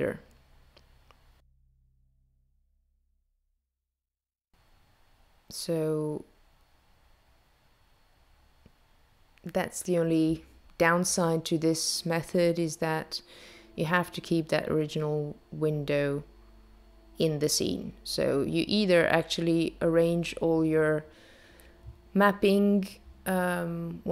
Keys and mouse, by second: 3.2 shift+click, 8.6 shift+click, 11.2 shift+click, 17.3 shift+click.